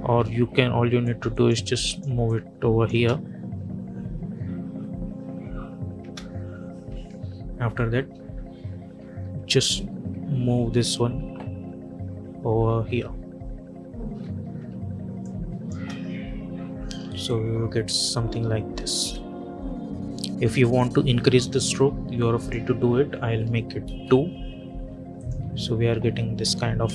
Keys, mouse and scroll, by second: 0.0 j, 0.9-2.8 drag, 2.8 space, 5.9 space, 6.8 -, 6.9 -, 8.9 Up, 10.6 Left, 14.3 -, 14.5 -, 15.1 click, 15.6 space, 18.8 space, 20.5 click, 23.7 Return, 25.1 click, 25.6 `, 26.4 `, 26.8 space.